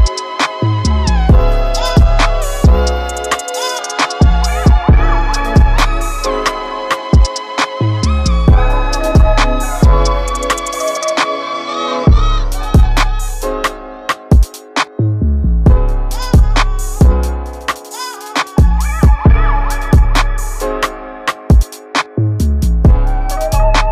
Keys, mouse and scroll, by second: 3.4 click, 5.3 click, 5.7 scroll down 3, 6.0 z, 6.4 Tab, 6.6-7.4 middle drag, 7.4 z, 7.8-8.8 shift+middle drag, 8.8 click, 10.0-12.8 drag, 14.0 KP_1, 15.8 g, 18.9-19.4 scroll up 2, 19.4-20.1 shift+middle drag, 20.1 click, 20.8-23.9 shift+middle drag.